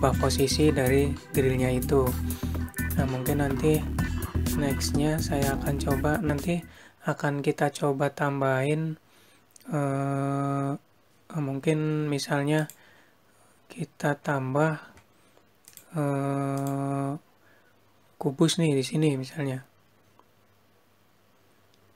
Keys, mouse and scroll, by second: 17.5 click.